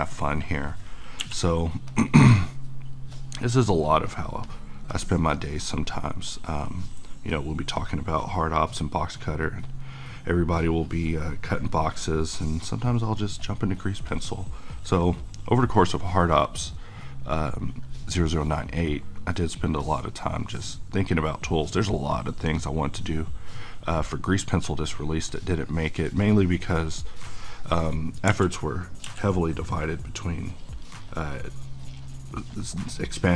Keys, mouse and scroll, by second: 1.2 f, 1.9 click, 28.2 f, 28.4 click, 29.0 f, 29.7-33.3 drag.